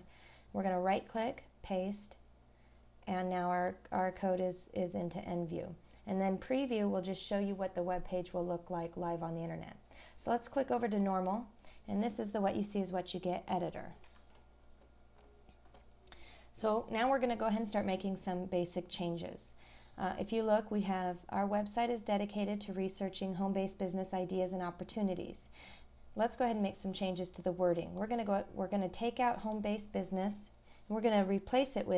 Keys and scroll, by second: 3.3 scroll down 1.